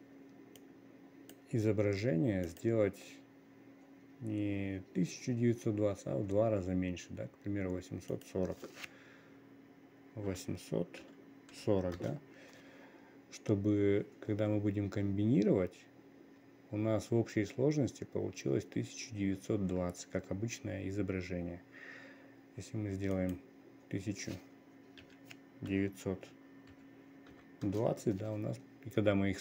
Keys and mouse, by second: 0.1 click, 1.2 click, 3.0 click, 8.6-28.2 drag.